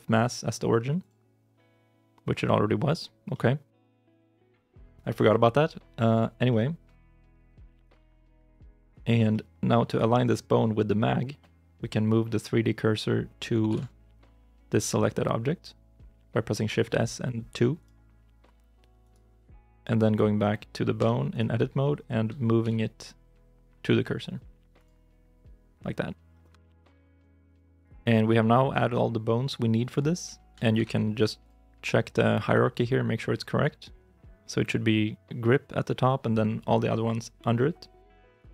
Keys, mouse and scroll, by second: 3.2 middle click, 6.3 shift+middle click, 7.4 KP_3, 7.8 KP_9, 8.7-9.0 scroll up 1, 9.2 shift+i, 9.2 shift+middle click, 13.5 shift+s, 18.9 right click, 20.8 Tab, 21.2 right click, 21.8 Tab, 22.5 shift+s, 26.2 scroll down 1, 26.5 shift+i, 31.2 ctrl+Tab.